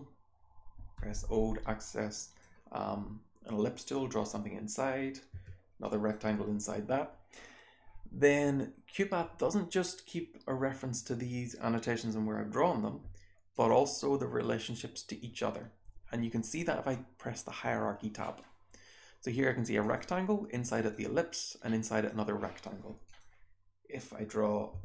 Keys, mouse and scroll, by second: 0.9 o, 1.8 click, 5.3 r, 5.8 click, 13.4 click, 19.8 click, 20.7 click, 21.8 click, 23.0 click, 24.6 p.